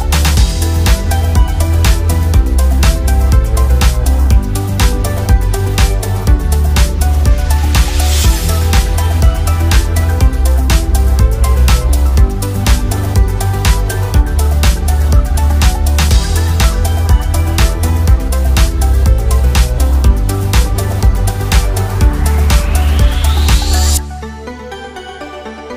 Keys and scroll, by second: 1.6 ctrl+d, 4.1 a.